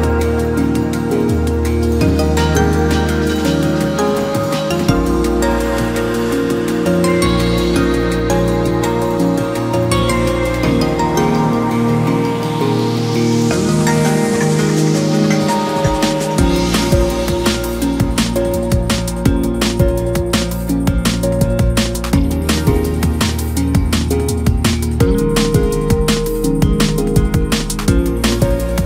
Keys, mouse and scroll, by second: 1.8 scroll up 1, 2.0 scroll down 1, 2.3 middle click, 3.0 click, 3.3-4.0 scroll up 1, 4.0 ctrl+f, 5.6 middle click, 6.4 click, 6.9 KP_1, 7.8-9.4 shift+middle drag, 9.4 s, 10.7-11.5 scroll down 1, 11.5-11.9 scroll up 1, 11.9 scroll down 1, 12.1 scroll up 1, 12.4 e, 14.5-15.2 scroll down 1, 15.2-15.5 middle drag, 15.5-16.1 scroll up 1, 16.1 ctrl+f, 17.0-17.4 scroll up 1, 17.4 2, 17.8 click, 18.4 shift+click, 18.5 shift+drag, 19.4 shift+click, 19.5 shift+click, 19.8 shift+scroll down 1, 20.1-20.6 middle drag, 20.6 click, 20.9-21.4 scroll up 1, 21.4 shift+click, 21.8 middle click, 22.1-22.6 scroll up 1, 22.6 shift+click, 23.3 shift+click, 23.5-24.0 scroll down 4, 24.0 middle click, 24.6-25.1 scroll up 2, 25.1 shift+click, 25.5 scroll down 1, 25.7 middle click, 26.5 shift+click, 26.6 shift+click, 26.9 middle click, 27.5 shift+click, 28.0 shift+click, 28.1 shift+click, 28.2-28.6 scroll down 5, 28.6 middle click.